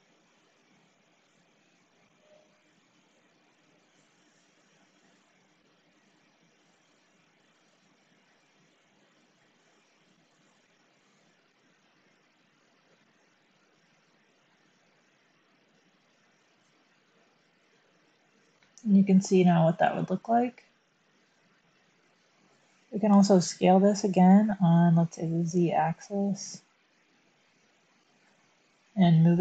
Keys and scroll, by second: 2.8 Tab, 22.1 1, 24.3 s, 25.4 z.